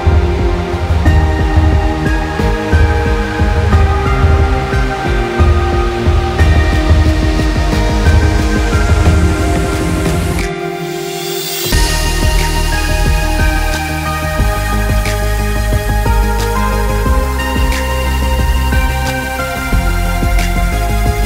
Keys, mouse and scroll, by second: 6.1 click, 8.2 click.